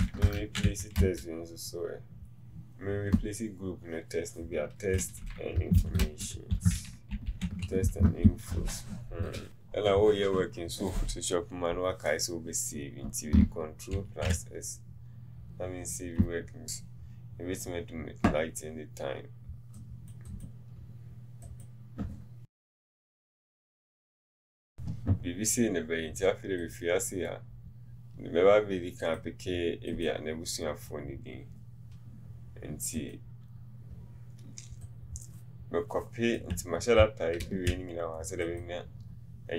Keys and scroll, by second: 22.5 shift+f.